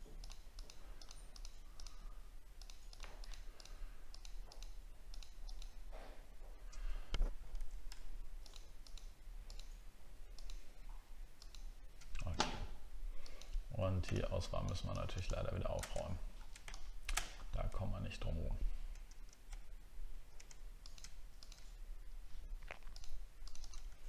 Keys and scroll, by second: 7.6 ctrl+z, 16.0 alt+scroll down 5, 17.3-17.6 alt+scroll up 6, 18.0 alt+scroll up 1.